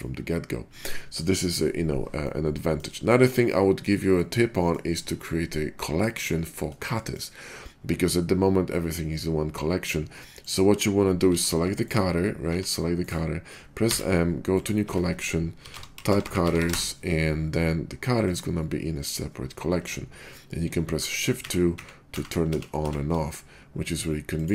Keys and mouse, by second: 0.0-4.2 drag, 4.2 shift+middle drag, 4.4-6.7 drag, 6.7 shift+middle click, 7.2-10.5 drag, 10.4 middle click, 10.4-11.9 right drag, 11.2 b, 11.9-16.8 middle drag, 12.4 g, 13.8 m, 16.2 t, 20.9-22.8 typing.